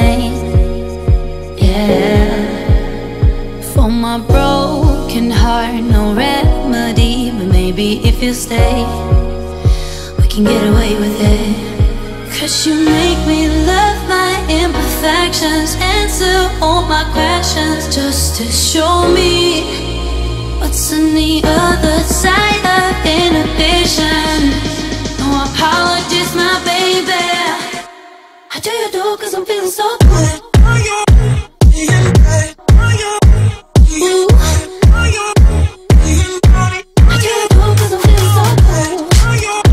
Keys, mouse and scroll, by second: 0.5 click, 0.7 space, 0.8-1.5 scroll down 1, 1.7 shift+middle click, 2.5 scroll down 1, 2.8 shift+middle click, 3.5 click, 4.2 middle click, 5.3 middle click, 5.9-6.7 scroll up 1, 7.0-10.5 shift+drag, 10.5 m, 11.1 ctrl+click, 11.5-11.8 scroll down 1, 12.4 Right, 13.6 click, 13.8 space, 14.6 s, 14.9-15.2 scroll up 1, 15.3 middle click, 16.6 click, 17.7-18.0 typing, 18.7 Return, 19.1 space, 19.9 scroll up 1, 20.3 middle click, 21.6-22.1 scroll up 1, 22.1 m, 23.1 click, 24.2 Right, 25.1 middle click, 26.2 click, 26.4 space, 26.5 scroll down 1, 27.1 shift+middle click, 28.1-28.5 scroll down 1, 28.5 click, 29.0 scroll up 1, 29.3 shift+middle click, 30.2 scroll down 1, 30.4 shift+middle click, 32.0 b, 33.6 click, 37.4-37.9 scroll up 1.